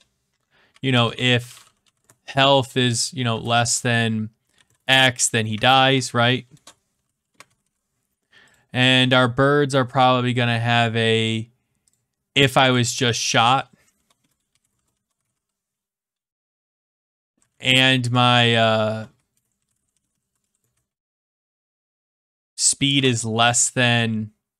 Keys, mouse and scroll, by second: 0.4-3.4 typing, 4.5-8.1 typing, 6.5 Return, 8.5 click, 9.0 middle click, 11.2 click, 11.9 click, 13.8-18.1 typing, 19.4-21.4 typing, 23.0 <.